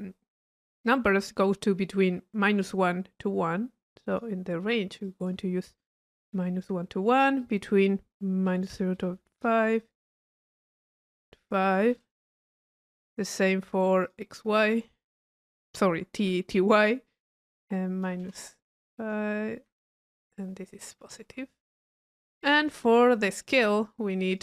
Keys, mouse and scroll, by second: 3.6 middle click, 4.3 click, 4.7 middle click, 5.0 drag, 7.4-7.7 drag, 11.6 click, 13.0 click, 14.1 click, 17.8 drag, 22.1 middle click, 22.6 click, 24.3 click.